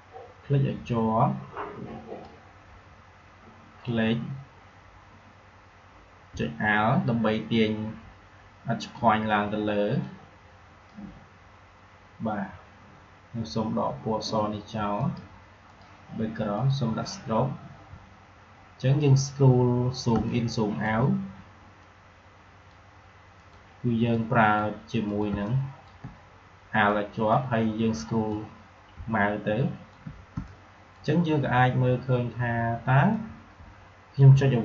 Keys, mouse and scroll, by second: 10.0-13.3 drag, 15.0 click, 18.0 alt+scroll up 1, 20.0 space, 20.2 click, 20.4 space, 21.7-25.0 drag, 25.2 space, 25.4 click, 25.7 space, 26.8-30.3 drag, 30.3 space, 33.0-34.6 drag.